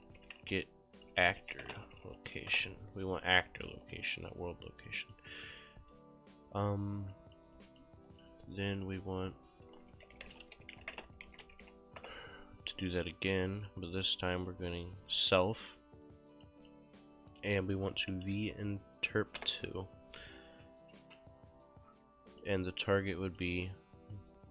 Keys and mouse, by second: 0.0-2.6 typing, 3.5 click, 3.8 q, 4.2 click, 5.8 right click, 6.7 click, 8.0 q, 8.2 click, 9.6 right click, 9.7-12.0 typing, 12.0 Return, 13.1 click, 14.6 right click, 15.6 click, 18.0 v, 18.5 n, 19.5 Return, 20.4 click, 21.8 click, 23.3 click.